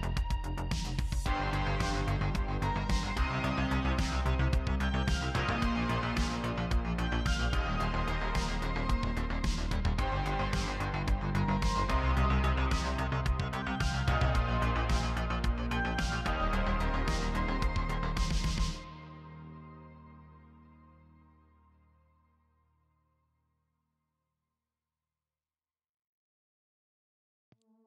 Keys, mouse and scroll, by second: 0.3 middle click, 0.4-1.8 typing, 0.5 middle click, 0.7 scroll down 3, 0.7 scroll up 1, 0.7 middle click, 0.9 middle click, 0.9 ctrl+r, 1.3 scroll down 1, 1.3 middle click, 1.4 alt+a, 1.6 scroll up 5, 1.7 middle click, 1.9 middle click, 2.1 click, 2.8 middle click, 3.0 click, 3.2 middle click, 3.3 KP_3, 3.5 g, 4.1 scroll down 7, 4.1 Tab, 4.2 shift+middle click, 4.4 shift+middle click, 4.4 scroll up 3, 4.5 shift+middle click, 4.7 shift+middle click, 4.8 scroll down 1, 4.8-5.8 scroll up 2, 5.0 middle click, 5.0 a, 5.1 middle click, 5.8 shift+middle click, 6.0 click, 6.0 middle click, 6.1-13.7 typing, 6.4 middle click, 6.5 click, 6.6 scroll down 1, 6.7 middle click, 6.8-7.4 scroll up 2, 7.0 ctrl+click, 7.5 scroll down 1, 8.6 shift+middle click, 8.7 scroll up 2, 8.7 middle click, 8.8 scroll down 1, 8.8 middle click, 9.1 middle click, 9.2 Tab, 9.3 ctrl+r, 9.6-10.4 scroll down 10, 9.7 middle click, 9.7 Tab, 10.2 middle click, 10.3 click, 10.3 middle click, 10.4 middle click, 10.6 click, 10.6-11.0 scroll up 6, 10.8 Tab, 10.9 shift+middle click, 11.1 middle click, 11.5 middle click, 11.7 scroll up 1, 11.7 middle click, 11.8 ctrl+r, 12.0 middle click, 12.1 ctrl+r, 12.2 middle click, 12.3 scroll up 1, 12.3 Tab, 12.3 scroll down 1, 12.4 middle click, 12.5 click, 12.6 Tab, 12.7 shift+middle click, 12.7 scroll up 5, 12.9 middle click, 13.1 middle click, 13.3 scroll down 1, 13.4 middle click, 13.5-14.0 scroll up 4, 13.7 shift+middle click, 14.0 shift+middle click, 14.0 scroll down 2, 14.8 shift+middle click, 14.9 scroll up 1, 15.0 Tab, 15.2 click, 15.3 shift+d, 15.7 middle click, 15.8 scroll up 1, 15.9 middle click, 16.1 KP_3, 16.1 scroll down 3, 16.4 middle click, 16.4 a, 17.5-20.7 typing, 17.6 shift+middle click, 17.7 scroll up 1, 17.7 alt+click, 17.8 scroll down 1, 18.2 shift+middle click, 18.2 scroll up 1, 19.2 middle click, 19.6 ctrl+r, 19.7 middle click, 19.8-20.2 scroll down 4, 20.1 middle click, 20.2 middle click, 20.2 click, 20.3 scroll up 2, 20.4 shift+middle click, 20.6 shift+middle click, 21.1 middle click, 21.2 scroll down 1, 21.3 click, 21.8 shift+middle click, 21.8-25.0 typing, 22.0 middle click, 22.1 scroll down 1, 22.3 Tab, 22.3 middle click, 22.4 middle click, 22.4-23.1 scroll up 3, 23.1 scroll down 1, 23.2 middle click, 23.4 Tab, 23.4 middle click, 23.5 scroll up 2, 23.6 alt+click, 23.8 middle click, 24.0 shift+middle click, 24.3 middle click, 24.4-25.0 scroll up 2, 24.5 middle click, 24.6 ctrl+r, 24.8 shift+middle click, 25.0 shift+middle click, 25.9 middle click, 25.9 scroll down 4, 26.0 middle click, 26.0 scroll up 4, 26.1 KP_3, 26.1 Tab, 26.2 shift+middle click, 26.3 scroll down 1, 26.4 click, 26.5 middle click, 26.6 scroll up 1, 26.8 middle click, 26.8 shift+click.